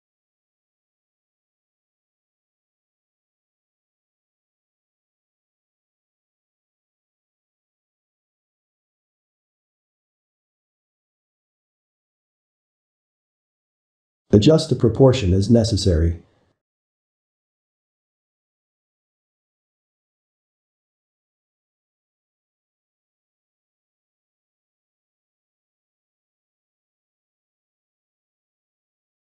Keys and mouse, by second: 0.0 Tab, 0.5-3.5 middle drag, 5.3-7.2 shift+middle drag, 7.9-8.6 middle drag, 8.6 Tab, 9.0-11.8 ctrl+middle drag, 11.8 Tab, 13.0 click, 14.2 middle click, 15.0 shift+click, 15.4-16.8 middle drag, 16.8 shift+click, 17.3 middle click, 17.8 g, 20.9 ctrl+click, 21.9 ctrl+click, 23.0 g, 24.2 middle click, 25.1-27.9 ctrl+middle drag, 27.9 g.